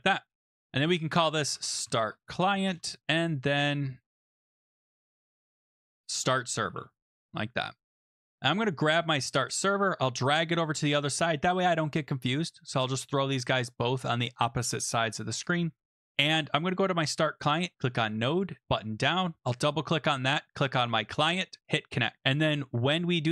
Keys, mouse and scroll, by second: 0.7-4.1 typing, 1.0 click, 4.7 click, 4.8 click, 5.1 click, 5.2-7.5 typing, 5.2 click, 7.5 Home, 8.1 click, 10.8 click, 13.0 click, 15.4 click, 17.8 click, 18.6 click, 19.4 click, 19.6 click, 21.6 click, 22.2 click, 22.5 Return, 23.2-23.3 typing.